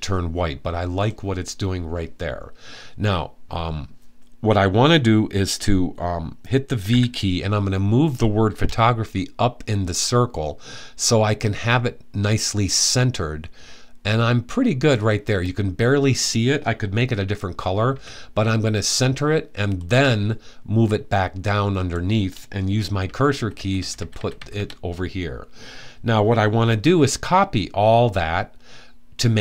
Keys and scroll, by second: 6.5 v, 17.6 Right, 22.7 Down, 23.0 Down, 23.2 Down, 23.4 Down, 23.6 Down, 23.8 Down, 24.0 Down, 24.2 Down.